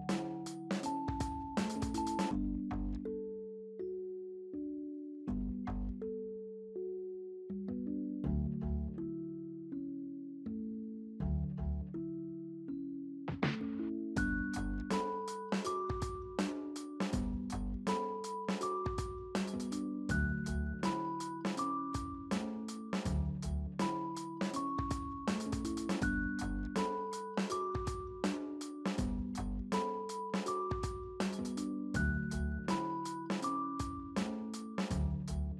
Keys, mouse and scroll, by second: 0.3 5, 0.4 5, 0.4 Tab, 1.3 middle click, 1.5 z, 3.6 f, 5.2 f, 6.5 scroll down 1, 6.7 alt+middle click, 7.3 alt+scroll up 1, 15.9 j, 21.7 alt+middle click.